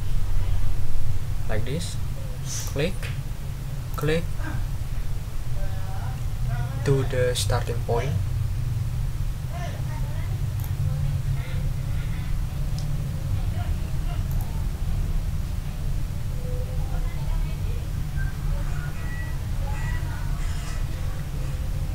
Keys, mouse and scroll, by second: 2.6 ctrl+click, 3.9 click, 10.6 click, 14.3 click.